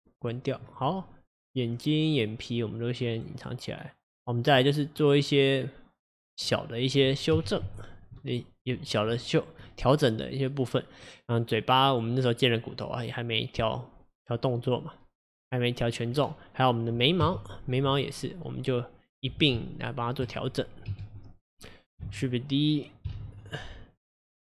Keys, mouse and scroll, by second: 0.8 click, 3.2 click, 3.8 scroll up 1, 4.2 click, 4.7-6.1 middle drag, 6.1 click, 6.5 click, 7.4 KP_1, 7.7 KP_3, 9.4-9.8 scroll down 1, 9.8-11.9 middle drag, 11.9 click, 16.2-17.3 scroll up 1, 17.3 KP_1, 18.2-19.6 middle drag, 19.6 Tab, 21.0 KP_1, 23.2 shift+d.